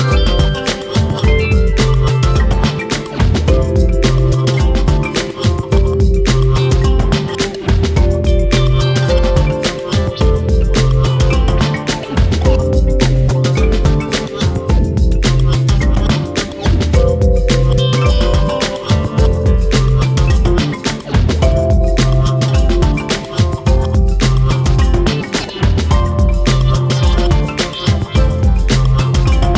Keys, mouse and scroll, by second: 0.2 alt+/, 0.3 middle click, 1.1 click, 1.7 middle click, 2.1 click, 2.3 middle click, 2.8 alt+/, 3.1 alt+/, 3.2 middle click, 3.6 scroll up 1, 3.8 click, 5.0 middle click, 5.7 click, 5.9 middle click, 6.5 click, 6.7 scroll down 1, 6.8 shift+middle click, 7.2 scroll down 1, 7.4 shift+middle click, 7.6 scroll up 1, 7.8 shift+middle click, 8.5 click, 8.8 middle click, 9.1 scroll up 2, 9.2 shift+middle click, 9.8 scroll up 1, 10.0 shift+middle click, 10.6 click, 11.1 middle click, 11.8 click, 12.7 click, 13.1 middle click, 13.7 click, 14.4 middle click, 14.6 click, 14.8-15.8 middle drag, 16.1 click, 16.8-17.9 middle drag, 18.8 scroll down 1, 19.0 shift+middle click, 19.6 scroll up 4, 19.8 middle click, 20.2-20.6 scroll down 1, 20.6 click, 21.0 KP_Decimal, 21.4-21.8 scroll down 1, 21.8-23.1 shift+middle drag, 23.2 click, 23.5 click, 24.5 r, 25.1 scroll down 1, 25.3 middle click, 25.7 scroll down 1, 25.9 middle click, 26.2 Tab, 26.3 click, 26.5-27.0 scroll down 4, 27.0 ctrl+s, 27.5 KP_7, 28.8 scroll down 2, 28.9-29.5 middle drag.